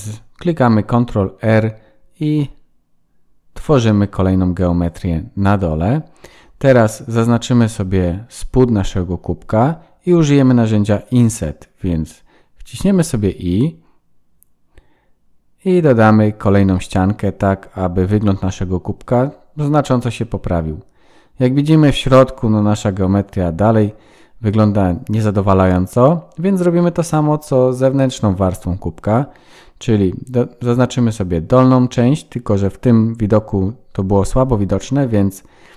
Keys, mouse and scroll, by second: 6.1 middle click, 6.5-7.6 scroll down 11, 7.7-8.4 scroll up 5, 8.4 scroll down 1, 9.6 scroll down 1, 10.2 click, 10.2 3, 10.8 shift+middle click, 17.8 Tab, 18.2 scroll down 1, 18.3 middle click, 21.6-22.4 scroll up 1, 22.5 shift+middle click, 24.5 Tab, 25.6 click, 26.0 click, 26.4 click, 26.9 middle click, 27.7 click, 28.0 click, 28.4 click, 29.0 click, 30.5 alt+click, 33.8 click, 35.3 middle click.